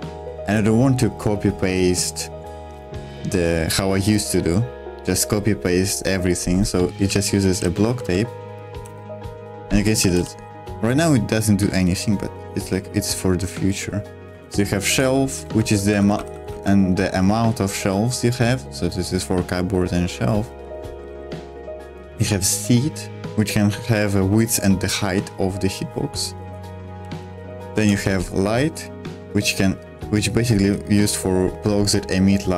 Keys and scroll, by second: 7.1-10.7 typing, 14.2-16.9 typing, 20.6-22.4 typing, 26.4 Escape, 26.7-28.3 typing.